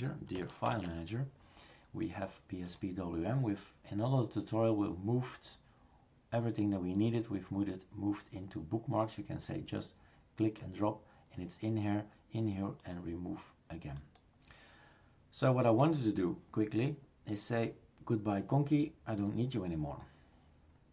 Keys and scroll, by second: 0.7 shift+super+Return.